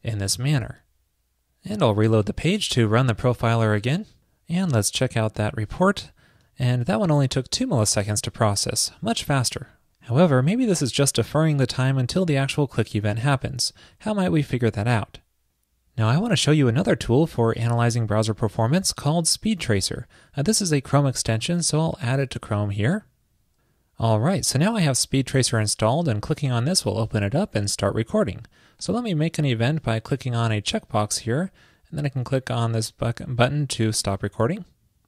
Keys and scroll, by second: 0.6 super+s.